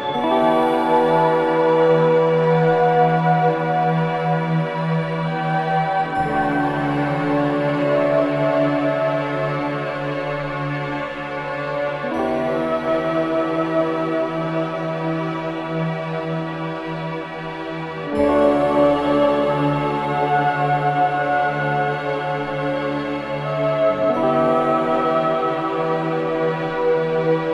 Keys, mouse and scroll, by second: 9.7-10.1 scroll down 1, 11.4 scroll up 1, 11.9-12.3 scroll down 1, 14.5 scroll up 1, 15.2-27.4 drag.